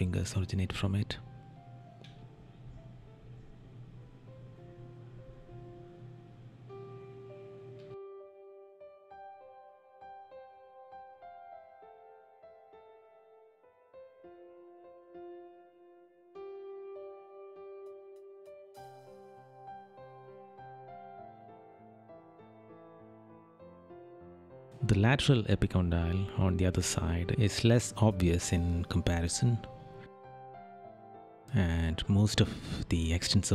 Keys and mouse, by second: 2.4 right click, 8.2 right click, 15.2 right click, 19.2 right click, 20.9 right click, 24.6 right click, 29.1 right click, 33.1 right click.